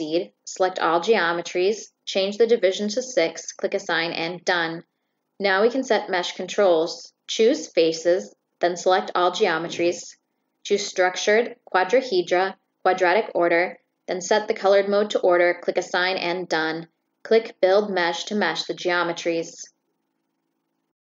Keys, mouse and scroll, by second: 0.4-1.5 drag, 0.7 right click, 2.3 click, 3.6 drag, 4.3 click, 5.5 click, 6.5-6.9 drag, 7.1-8.5 drag, 9.1 click, 10.7 click, 11.2 click, 12.0 click, 12.3 click, 12.9 click, 13.7 click, 15.0-15.5 drag, 15.6 click, 16.8 click.